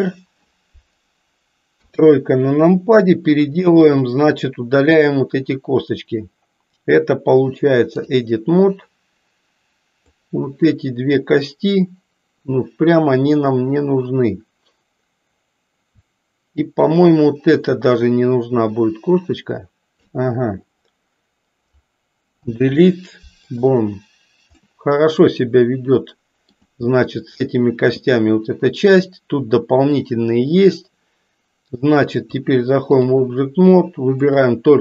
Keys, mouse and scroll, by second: 1.7 KP_3, 3.8-8.2 drag, 10.0-11.4 drag, 16.9-20.1 shift+drag, 22.3 Delete, 24.6-26.7 middle drag, 32.1-33.2 drag, 34.2 click.